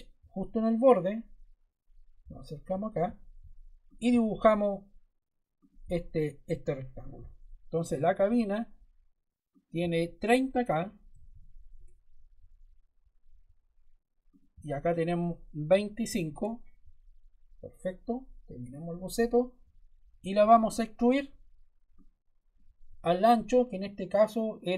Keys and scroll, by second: 7.9 d, 10.8-11.7 typing, 15.6 2, 16.0 5, 16.3 Return, 20.3 e.